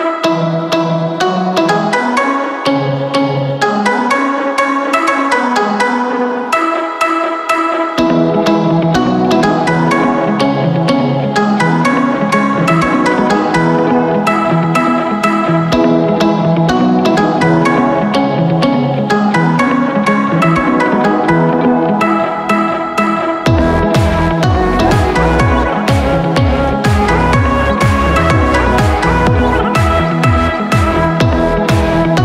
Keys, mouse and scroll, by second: 20.6 ctrl+i.